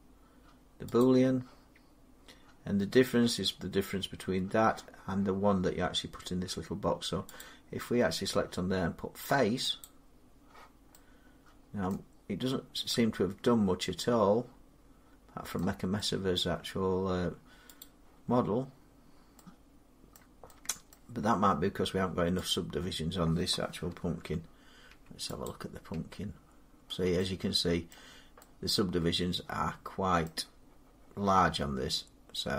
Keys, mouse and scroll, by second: 0.8 click, 7.2 click, 9.7 click, 11.7 middle click, 12.4 scroll up 3, 13.5 middle click, 15.1 scroll up 3, 15.4 scroll down 1, 15.8 scroll, 16.2 middle click, 17.6 click, 18.1 scroll down 2, 20.0 middle click, 20.7 middle click, 22.3 click, 23.8 Tab, 24.7 Tab, 25.3 click, 25.8 Tab, 27.7 middle click, 30.1 middle click.